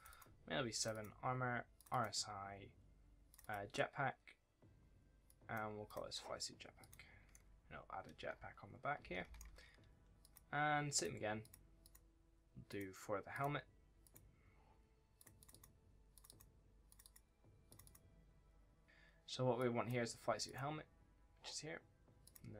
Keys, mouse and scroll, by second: 7.2 right click, 7.3 d, 8.0 scroll up 1, 8.0 d, 8.3-8.7 scroll down 1, 8.8 a, 8.8 scroll up 1, 9.1 scroll down 1, 9.2 s, 10.1 click.